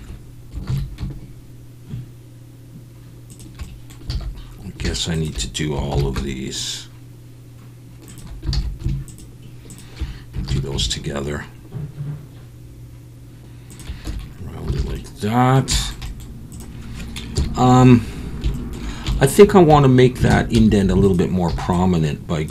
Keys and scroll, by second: 0.7 ctrl+b, 4.1 alt+a, 5.9 ctrl+b, 8.5 alt+a, 10.5 ctrl+b, 14.1 Tab, 14.8 alt+a, 17.3 KP_1, 19.7 Tab, 20.3 alt+a, 20.5 z, 21.5 b.